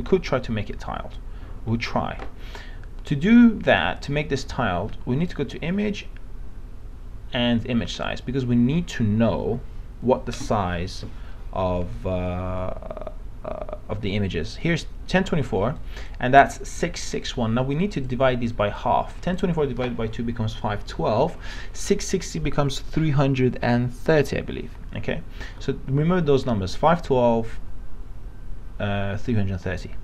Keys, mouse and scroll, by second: 5.3 click.